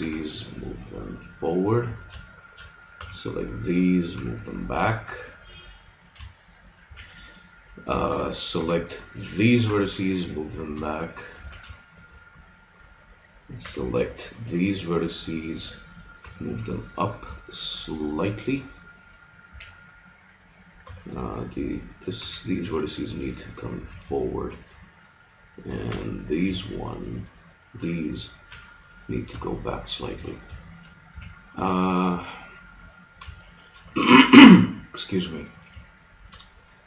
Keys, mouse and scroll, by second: 0.0 g, 1.9 a, 2.1 middle click, 2.9 b, 4.1 g, 6.1 click, 6.8 a, 8.6 b, 9.7 g, 11.4 a, 11.9 click, 13.6 b, 13.8 click, 16.2 g, 19.1 middle click, 19.5 a, 20.9 b, 22.2 g, 23.8 a, 25.9 b, 28.5 g, 30.2 a, 31.1 a, 34.7-35.9 scroll up 1, 35.9-36.7 scroll up 1, 36.7-36.8 scroll up 1.